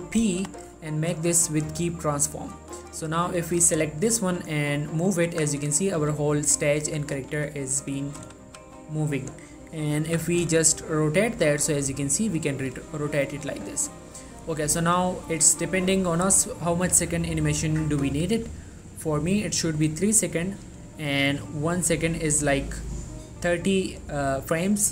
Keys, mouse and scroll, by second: 0.3 ctrl+p, 2.1 click, 3.5 g, 5.2 right click, 5.4 z, 5.7-6.2 scroll down 1, 6.2 g, 6.5 right click, 7.5 g, 7.8 right click, 8.5 g, 9.0 right click, 10.3 r, 10.6 z, 13.3 right click, 13.7 middle click, 15.6-18.4 drag.